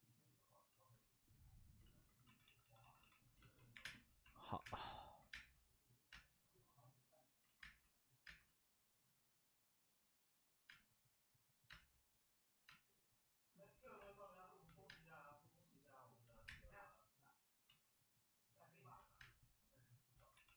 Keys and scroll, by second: 1.7 ctrl+z, 2.2-6.1 typing, 7.4 ctrl+z, 7.5 space, 8.2 space, 10.6 space, 12.6 space, 14.1 space, 14.8 space, 16.2 ctrl+z, 16.4 space, 17.6 ctrl+z, 19.1 space, 20.3 d, 20.5 d.